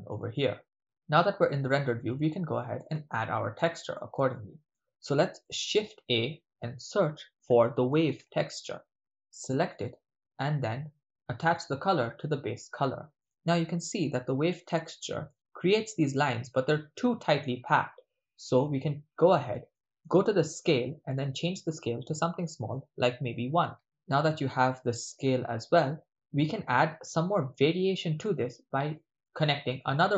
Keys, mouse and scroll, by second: 2.3 shift+middle click, 3.2 ctrl+middle click, 4.3 shift+middle click, 5.6 shift+a, 11.6-13.2 drag, 13.2 ctrl+middle click, 13.7-14.6 shift+middle drag, 14.9-15.4 ctrl+middle drag, 19.1 middle click, 19.7 ctrl+middle click, 20.2 middle click, 21.1-23.4 drag, 24.3-26.5 middle drag, 27.6-28.3 ctrl+middle drag, 29.0-29.4 middle drag, 29.7 click.